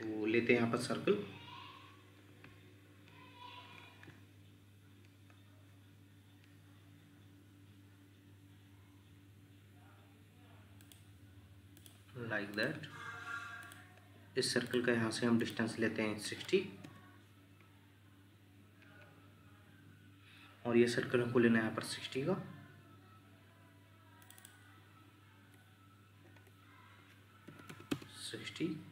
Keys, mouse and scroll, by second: 16.2 6, 16.8 Return, 24.4 double click, 27.5 typing, 27.9 Return.